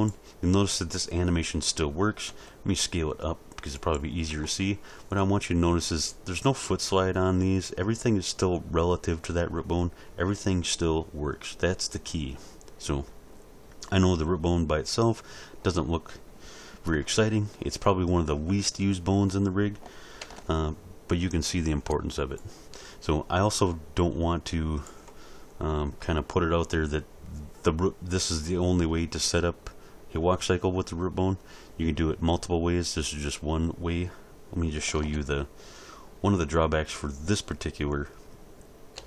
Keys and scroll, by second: 2.3 s, 20.1 alt+a, 34.9 alt+a, 38.9 r.